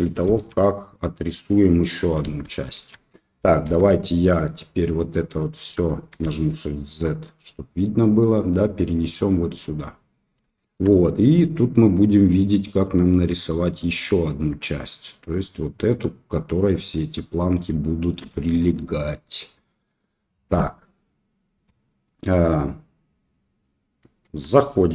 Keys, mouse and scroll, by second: 0.2 KP_Enter, 0.2 KP_3, 2.2 KP_1, 2.7 KP_3, 3.6 Tab, 4.9 click, 6.2 shift+z, 7.4 click, 9.9-11.8 middle drag, 12.8-13.8 middle drag, 14.4-15.7 drag, 18.0 shift+click, 24.2 Tab.